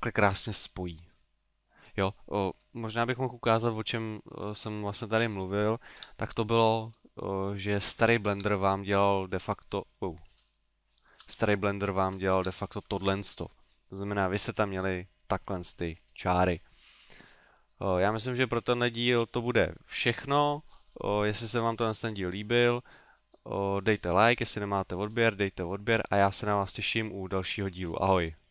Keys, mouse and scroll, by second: 0.6 middle click, 2.9 ctrl+z, 3.7 right click, 4.4 shift+right click, 5.0 right click, 6.0 f, 6.7 right click, 7.5 shift+right click, 8.0 shift+right click, 8.4 f, 9.1 right click, 10.5 shift+right click, 10.9 shift+right click, 11.3 f, 11.8 shift+right click, 12.4 f, 13.0 a, 13.4 middle click.